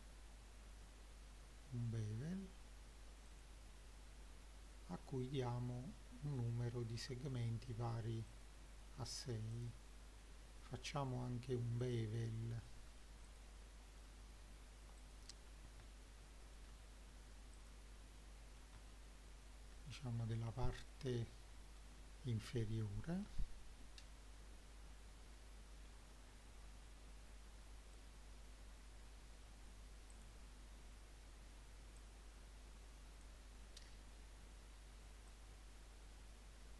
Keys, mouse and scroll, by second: 3.3 click, 4.7-6.4 drag, 8.3 click, 9.5 click, 11.8 ctrl+click, 12.7 middle click, 13.3 click, 13.7 middle click, 15.0 click, 15.5 scroll down 1, 15.9 shift+middle click, 17.6 ctrl+click, 18.2 middle click, 18.8 shift+middle click, 20.2-20.9 scroll up 3, 20.9 middle click, 23.3 ctrl+b, 28.0-29.3 right drag, 30.2 click, 32.0 click, 35.3-36.7 drag.